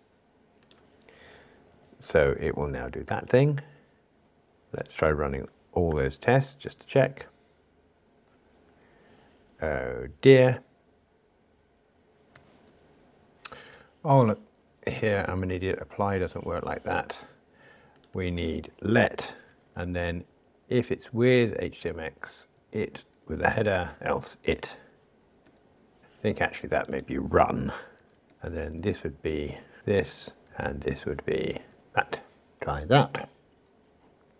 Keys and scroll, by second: 3.2 super+v, 5.9 ctrl+shift+r, 19.7 Escape, 22.8 alt+shift+Left, 23.1 Escape, 28.3 Escape, 31.9 alt+shift+Left, 32.6 ctrl+r.